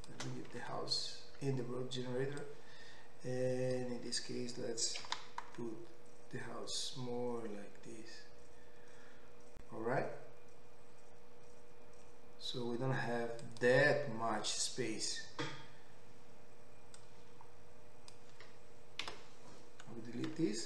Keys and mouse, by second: 0.0 click, 1.3 Tab, 2.5-13.5 drag, 5.0 s, 13.5-17.0 middle drag, 17.0-20.6 drag, 19.2 Delete.